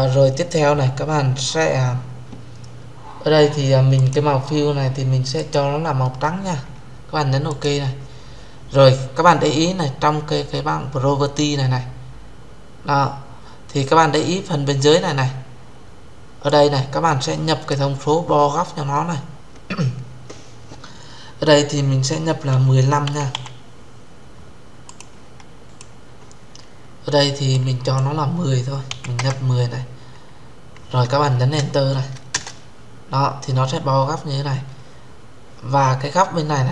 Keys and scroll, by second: 32.0 Return.